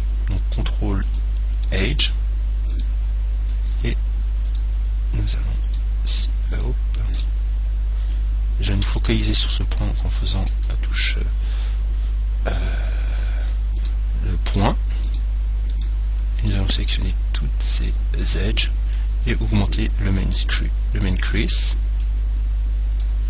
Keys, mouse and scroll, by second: 2.2-8.5 right drag, 9.0 KP_Decimal, 14.0-17.7 right drag, 17.0-19.0 middle drag, 19.2 click, 22.3 click.